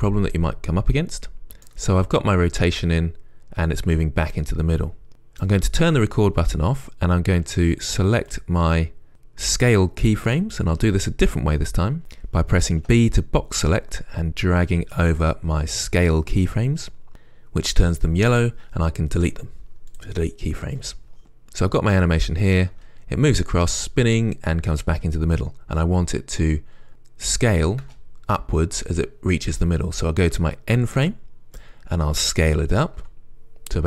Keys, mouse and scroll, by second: 8.6 click, 20.3 Delete, 21.2-23.0 right drag, 23.0 space, 25.5-32.0 right drag, 28.2 space, 33.3 s.